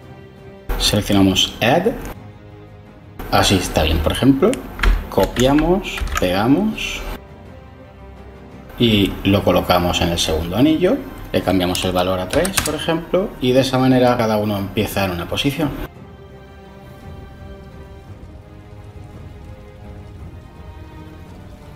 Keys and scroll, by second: 5.1 ctrl+c, 5.9 ctrl+v, 12.2 3, 12.5 Return.